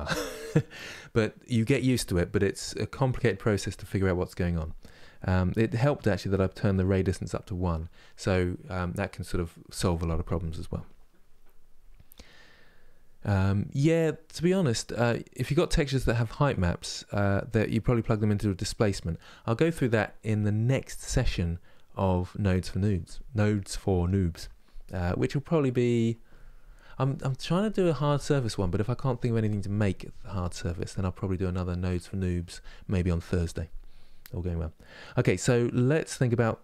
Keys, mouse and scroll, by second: 34.1-35.6 middle drag, 35.6-36.1 scroll down 1.